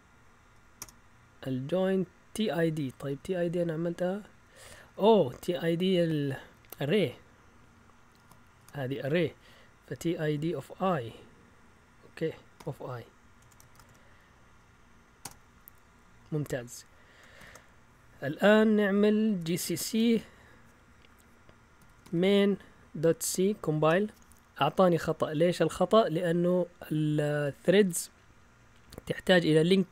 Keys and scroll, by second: 0.7 Return, 2.5 Up, 2.8 Up, 2.9 Up, 3.1 Up, 3.4 Up, 4.3-7.2 typing, 8.2-15.2 typing, 15.2 Return, 17.4 ctrl+l, 17.4 typing, 19.4-20.1 typing, 21.6-23.2 typing, 23.8 Return.